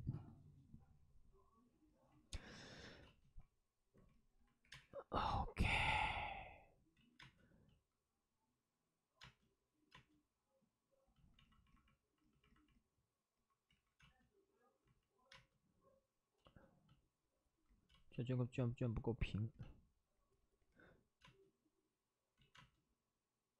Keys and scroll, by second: 3.0 space, 4.5 3, 4.6 space, 5.2 space, 5.9 space, 6.9 ctrl+z, 7.1 space, 13.6 ctrl+z, 13.9 space, 15.2 space, 16.3 space, 17.8 space, 21.1 space, 22.5 ctrl+z, 22.5 space.